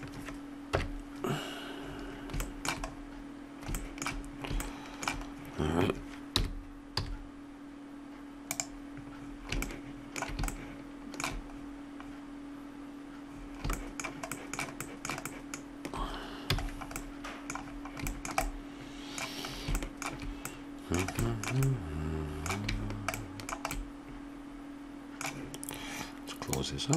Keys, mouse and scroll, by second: 6.3 g, 16.5 a, 17.3 middle click, 26.5 click.